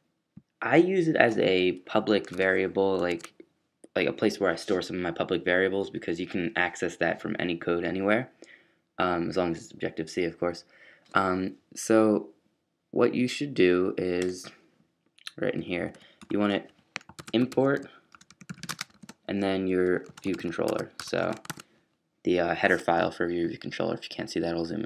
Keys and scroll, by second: 1.9 fn+Down, 2.1 BackSpace, 2.3 BackSpace, 3.1 super+s, 5.2 typing, 15.9 Up, 17.2-21.7 typing, 22.9-24.8 typing.